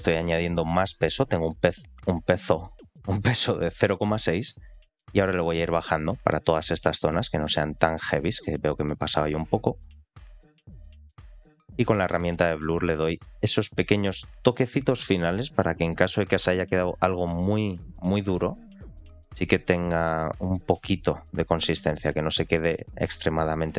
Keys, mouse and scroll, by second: 0.2 click, 1.4-1.7 middle drag, 1.9 middle click, 2.5 shift+middle click, 2.9 middle click, 3.5 click, 3.7 click, 3.9 click, 4.9 click, 6.0 click, 6.3 click, 6.5 click, 6.7 click, 6.9 click, 7.1 click, 7.4 click, 7.6 click, 7.8 click, 8.0 click, 8.3 middle click, 8.9 click, 9.1 click, 9.4 click, 9.6 click, 9.8 middle click, 10.3 middle click, 11.1 click, 11.3 click, 11.5 ctrl+z, 11.5 middle click, 11.8 click, 12.5 f, 13.0 click, 13.4 click, 13.8 middle click, 14.5 click, 14.7 click, 15.0 middle click, 15.5 middle click, 16.2 click, 16.4 click, 16.6 click, 16.9 click, 17.1 middle click, 17.6 click, 17.9 click, 18.1 click, 18.3 click, 18.6 click, 18.8 click, 19.1 click, 19.3 click, 19.5 click, 19.7 click, 19.9 click, 20.1 click, 20.3 click, 20.5 click, 20.7 click, 20.9 click, 21.2 click, 21.4 click, 21.6 click, 21.9 click, 22.1 click, 22.3 click, 22.6 middle click, 23.1 click, 23.4 click, 23.6 click.